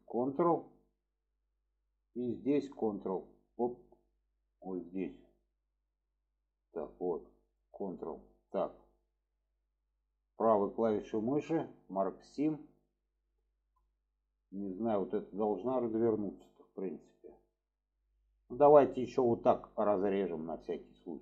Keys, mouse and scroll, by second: 0.2 ctrl+click, 0.8-1.9 middle drag, 2.7 ctrl+click, 3.7 middle click, 7.4 ctrl+click, 8.6-9.9 middle drag, 11.1-12.7 right drag, 13.4 shift+middle drag, 16.1-17.6 middle drag, 17.8 shift+middle drag, 19.1-19.6 drag, 19.6 middle click.